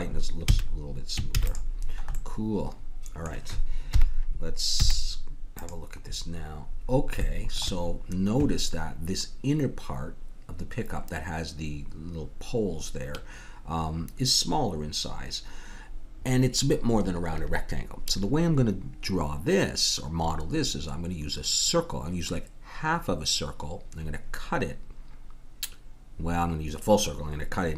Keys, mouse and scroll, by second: 0.4 a, 1.3 ctrl+s, 4.0 KP_1, 4.8 z.